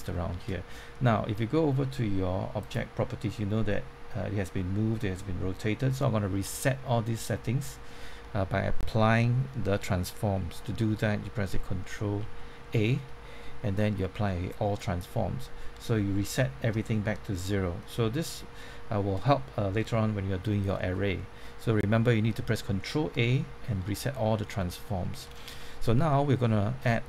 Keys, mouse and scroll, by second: 2.5 click, 12.1 ctrl+a, 14.5-15.7 drag, 18.6 shift+middle click, 20.5-22.7 scroll down 1, 24.6 middle click, 25.3 scroll down 1, 25.5 middle click, 26.1 shift+middle click, 26.8 middle click.